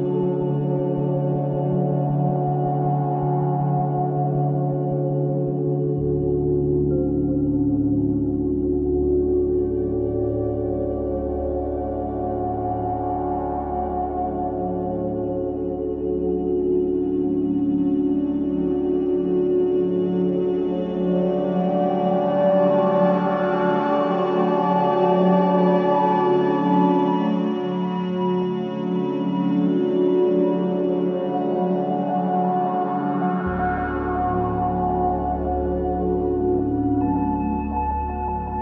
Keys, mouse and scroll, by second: 1.4-3.9 middle drag, 3.9 e, 7.0 ctrl+z, 7.9 e, 11.6 ctrl+z, 12.6 middle click, 13.6-14.8 drag, 16.1-16.8 drag, 18.1-19.5 middle drag, 19.8-21.4 middle drag, 21.9-22.3 scroll up 1, 22.3-23.5 middle drag, 23.5 e, 26.7 click, 27.1-28.7 middle drag, 29.7-30.2 scroll up 1, 30.2 middle click, 31.2-32.0 scroll up 1, 32.0-33.8 shift+middle drag, 33.8-35.9 drag, 37.2-38.4 drag.